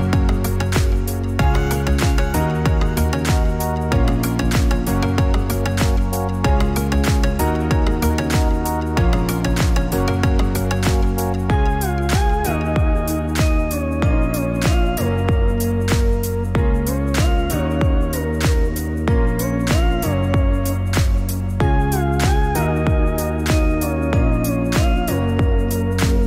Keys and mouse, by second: 6.5 click, 9.2 click, 12.7-19.6 drag.